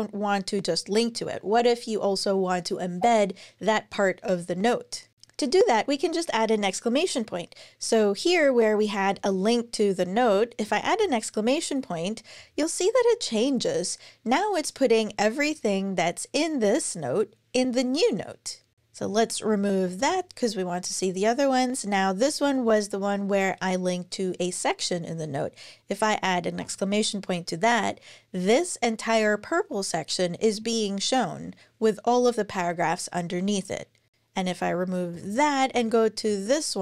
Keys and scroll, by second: 5.1 Down, 8.9 super+Left, 10.5 shift+1, 19.1 super+Left, 19.3 shift+Right, 19.8 BackSpace, 22.1 Down, 22.2 Down, 26.3 shift+1, 34.9 BackSpace, 35.5 Down, 36.1 Down.